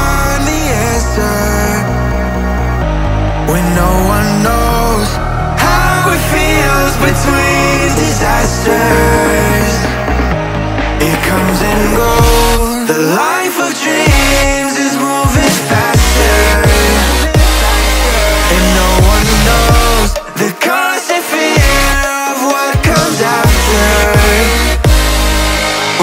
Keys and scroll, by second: 0.1 Return, 16.6 ctrl+i, 24.2 Return.